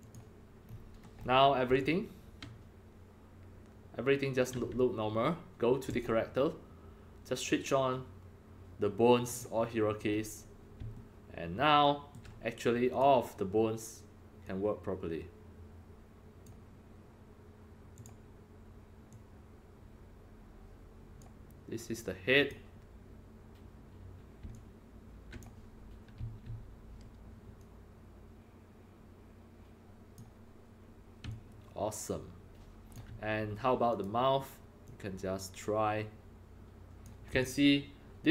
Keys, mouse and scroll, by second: 0.0 click, 0.6-1.1 scroll up 4, 1.1 scroll, 1.2 scroll up 4, 1.8-4.4 alt+drag, 5.8 click, 9.2 click, 10.0-10.4 scroll up 2, 11.0-13.0 alt+middle drag, 12.8-16.4 alt+drag, 17.9 click, 19.1-21.1 drag, 22.4 click, 24.5 alt+click, 26.1 e, 27.6-30.2 drag, 31.3-32.9 alt+drag, 33.8 click, 34.8-37.0 drag, 37.4-38.3 alt+drag.